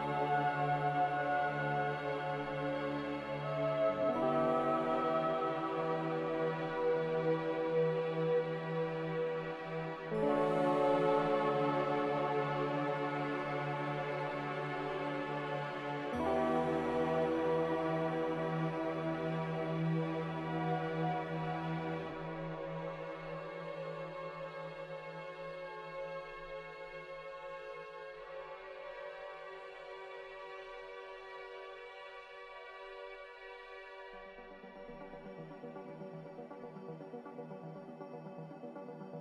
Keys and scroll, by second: 4.7 z, 8.4-9.7 typing, 26.5 q, 27.0 q, 29.8 a.